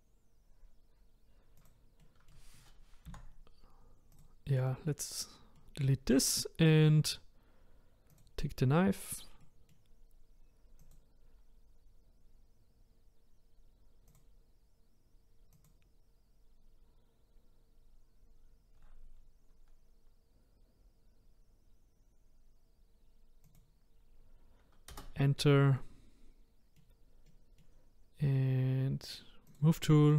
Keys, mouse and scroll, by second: 2.0-4.2 middle drag, 4.2 Delete, 4.7-8.2 middle drag, 8.2-9.4 drag, 9.4-10.9 middle drag, 10.9 click, 14.1-17.1 drag, 25.7-29.6 middle drag, 29.6 click.